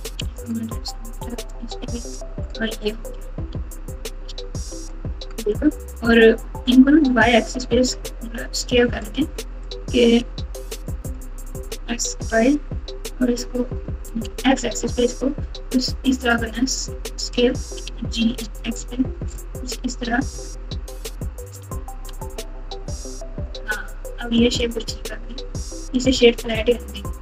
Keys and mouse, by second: 0.2 m, 1.0 click, 1.6 m, 3.5 alt+z, 4.2 alt+z, 7.5 KP_4, 8.7 3, 9.7 click, 11.0 click, 11.7 s, 17.8 g, 22.2 Tab, 24.3-26.3 right drag.